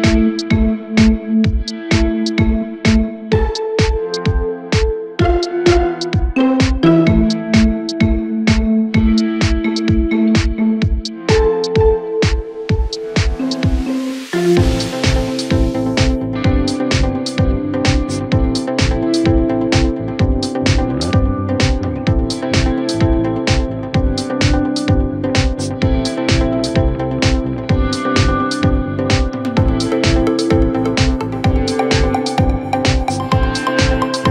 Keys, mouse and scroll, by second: 0.2 ctrl+i, 0.9 x, 3.0 Tab, 3.3-3.8 scroll down 2, 3.8 s, 5.5 KP_7, 6.2-6.6 scroll up 2, 6.7 r, 11.3-11.6 scroll up 2, 11.7 Tab, 12.5 2, 13.0 click, 13.5-14.1 scroll down 1, 14.1 click, 15.2 2, 15.7 click, 16.9 z, 19.3-19.7 scroll up 1, 19.7-20.2 scroll down 1, 20.2 s, 22.4 Tab, 22.9 KP_1, 23.5 r, 25.9 g, 28.8 ctrl+a, 32.5-34.2 drag, 34.2-34.3 scroll up 1.